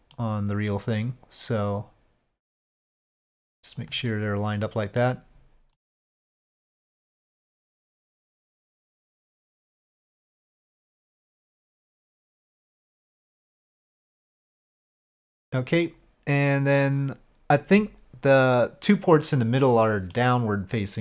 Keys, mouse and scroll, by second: 1.0-4.1 drag, 4.1-5.0 middle drag, 5.8-10.4 middle drag, 11.0-13.1 middle drag, 13.4-15.9 middle drag, 19.6-20.2 middle drag.